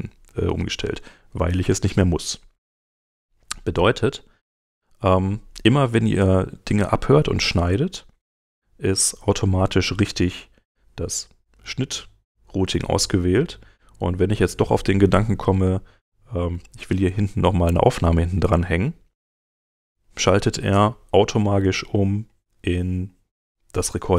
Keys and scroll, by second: 7.5 space.